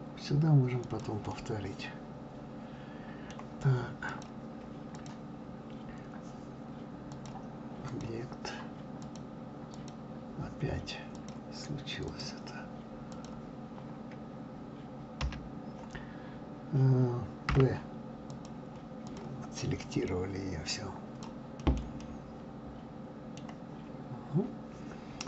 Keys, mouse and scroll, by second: 1.3-4.1 middle drag, 4.1 click, 4.9 click, 7.1-9.1 drag, 9.7 click, 11.1-13.2 drag, 15.2 l, 19.1 click, 19.9 click, 20.7 click, 21.6 middle click, 22.0-25.0 middle drag.